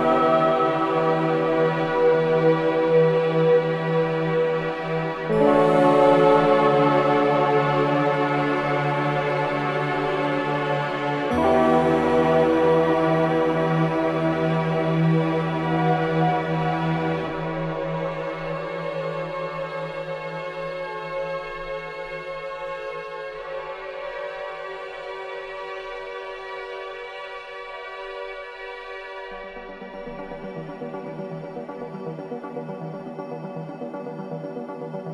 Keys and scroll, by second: 12.8 ctrl+j, 28.9 ctrl+j.